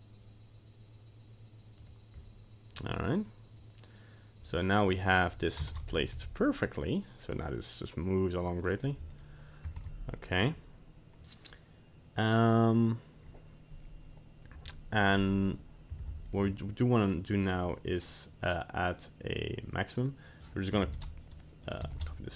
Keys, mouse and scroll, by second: 4.9 right click, 5.7 ctrl+Tab, 5.8 right click, 6.1 g, 9.1 right click, 9.8 ctrl+Tab, 10.4 right click, 15.5 right click, 16.0 ctrl+Tab, 16.3 right click, 17.2 click, 17.6 click, 20.4 click, 21.6 click.